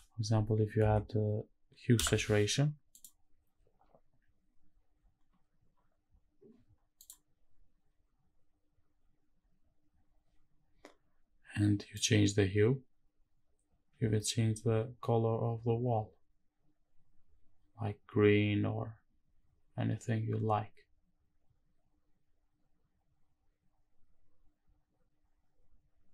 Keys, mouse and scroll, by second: 4.3-6.6 scroll up 1, 6.6-9.7 scroll up 2, 9.7 click, 9.7-11.2 scroll up 3, 11.9-26.1 drag.